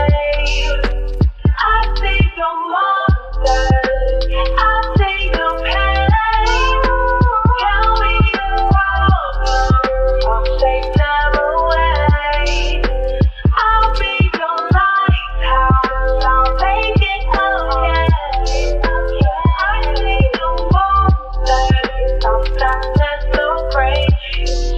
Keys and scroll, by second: 1.6 ctrl+shift+d, 2.4 Delete, 5.1 u.